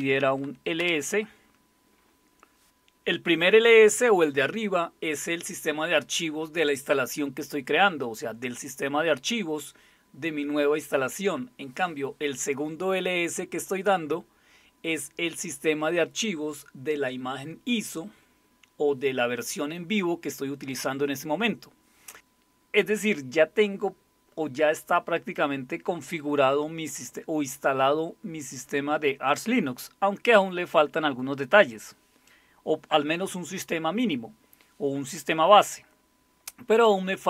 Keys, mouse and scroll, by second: 0.0-0.8 typing.